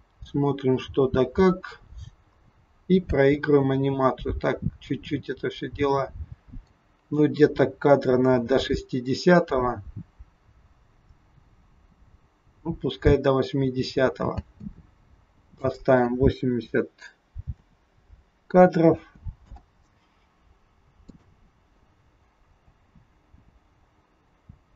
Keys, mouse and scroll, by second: 1.4-1.9 scroll up 2, 2.4 scroll down 1, 2.6 scroll down 2, 3.1 space, 14.4 space, 15.6 click, 21.1 click, 22.6 space.